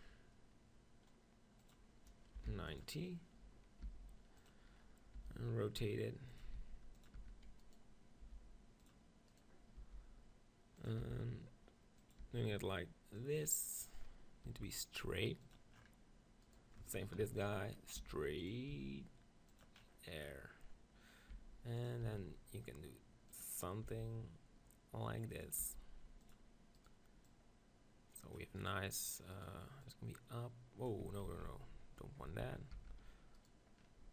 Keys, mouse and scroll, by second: 1.6-3.5 drag, 3.8 g, 4.5-11.1 drag, 5.2 r, 6.5 g, 7.3 Tab, 7.6 right click, 8.2 r, 9.9 g, 11.1 r, 12.1-15.1 drag, 12.2 g, 13.7-15.1 right drag, 14.1-15.1 middle drag, 18.5-20.1 drag, 18.7 r, 21.3 e, 21.9-23.6 drag, 22.2 r, 24.0 g, 25.4-27.4 drag, 25.6 r, 26.8 right click, 29.1 right click, 31.2 click, 31.4 ctrl+z, 32.2 Tab, 32.7 Tab, 33.4 click, 33.8-34.1 right drag.